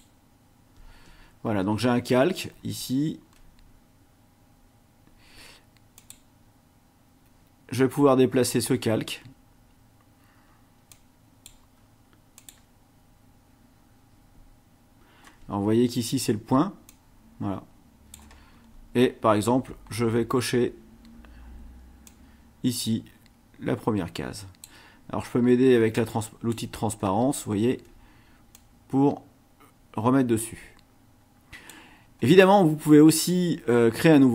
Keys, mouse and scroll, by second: 1.9-2.9 ctrl+scroll down 5, 3.3 ctrl+scroll down 2, 5.9 click, 8.5 click, 10.9 click, 12.3 click, 15.5-15.9 ctrl+scroll up 2, 16.9-18.3 drag, 18.5-18.9 scroll up 1, 19.9 scroll down 2, 21.0 scroll up 2, 22.1-24.8 drag, 25.9 click, 27.3-27.9 ctrl+scroll up 4, 28.5-31.9 drag.